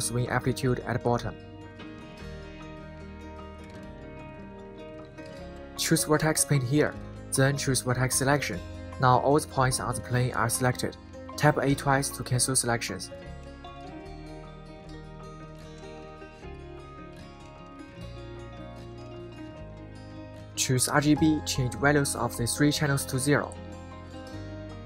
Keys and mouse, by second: 5.6-7.6 drag, 10.6 click, 16.3 a, 16.7 a, 17.1 a, 17.3 a, 22.1 click.